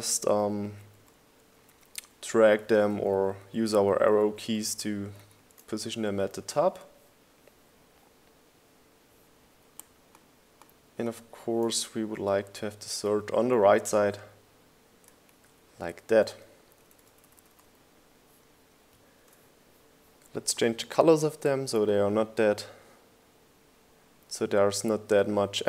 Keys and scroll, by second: 0.2 shift+Up, 0.4 shift+Left, 0.5 shift+Up, 0.8 shift+Left, 1.1 shift+Up, 1.3 shift+Left, 1.4 shift+Up, 1.7 shift+Left, 2.0 shift+Up, 2.6 shift+Left, 2.7 shift+Up, 3.8 shift+Left, 4.1 shift+Up, 6.0 shift+Left, 6.4 shift+Down, 6.7 Right, 6.9 Up, 7.3 Right, 8.0 Up, 16.5 shift+Left, 17.7 shift+Right, 18.1 Left.